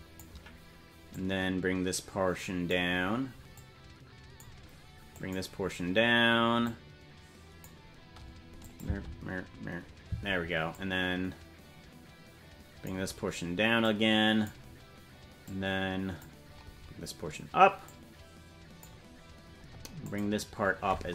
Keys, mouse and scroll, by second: 1.1-2.8 drag, 3.5 click, 5.1 click, 6.6-7.7 drag, 8.6 click, 8.8 space, 10.7-12.9 drag, 10.7 space, 13.8 click, 15.5 click, 17.8-18.9 drag, 20.0 click.